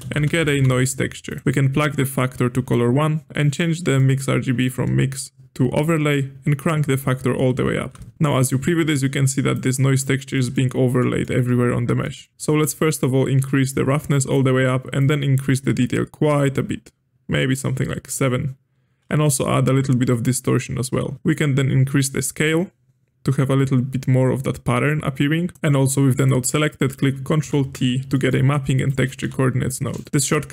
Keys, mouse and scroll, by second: 1.8-3.9 drag, 3.9-4.5 middle drag, 4.5-8.1 drag, 8.4-9.5 middle drag, 9.5 click, 10.3-10.9 middle drag, 10.9 scroll up 1, 10.9-12.3 middle drag, 12.3 ctrl+z, 14.1-18.0 drag, 19.3-24.0 shift+drag, 25.6 middle click, 25.6-27.4 drag, 27.4 ctrl+t, 27.8 scroll down 2, 28.1-28.8 middle drag, 28.8-29.2 drag, 29.2 g, 30.1 click.